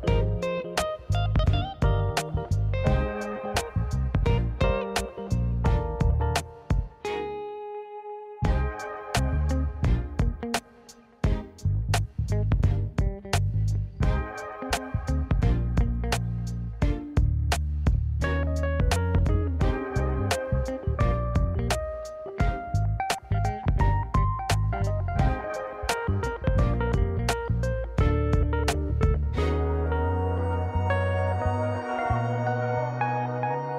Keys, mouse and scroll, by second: 0.0 shift+click, 0.2 middle click, 1.0 ctrl+b, 2.2 middle click, 2.5 Tab, 2.7 middle drag, 3.1 click, 3.2-3.7 right drag, 3.8 middle drag, 4.0 scroll down 1, 4.3 middle click, 4.5 scroll up 2, 4.9-6.0 middle drag, 6.4 click, 6.6 middle drag, 7.0 scroll down 1, 7.1-7.4 middle drag, 7.7 click, 7.8 middle click, 8.2 middle click, 8.7 middle click, 9.2 middle click, 9.8 KP_1, 10.1 shift+a, 16.6-17.0 middle drag, 17.2 middle click, 17.6 s, 20.1-20.7 middle drag, 21.1 KP_7, 21.3 alt+z, 21.5 scroll up 3, 22.0-22.3 scroll down 1, 22.3 s, 24.7 middle drag, 25.3 alt+z, 25.5-25.8 middle drag, 26.1 click, 26.2-26.7 middle drag, 27.1 KP_1, 28.1 middle click, 29.8 middle click, 30.2 KP_1, 30.7 shift+middle drag, 31.0 shift+a, 32.0 middle click, 32.2 Tab, 32.4 middle click, 32.9 middle click.